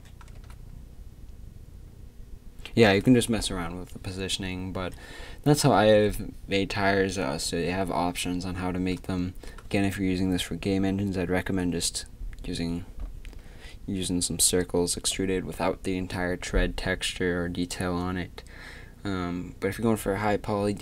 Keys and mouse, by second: 0.9 shift+z.